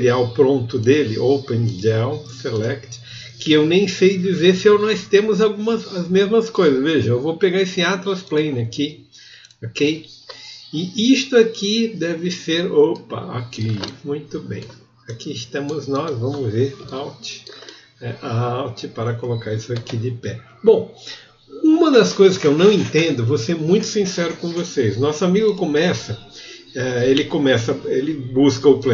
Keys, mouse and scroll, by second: 25.5 click.